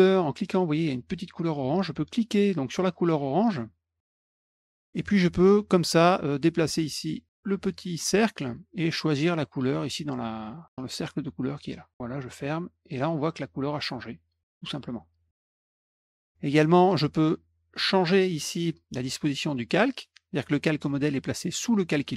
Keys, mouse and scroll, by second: 2.7 click, 2.8 click, 4.7 click, 6.6 click, 9.8-11.9 drag, 12.1 click, 13.7 click, 14.8 click, 15.9 click.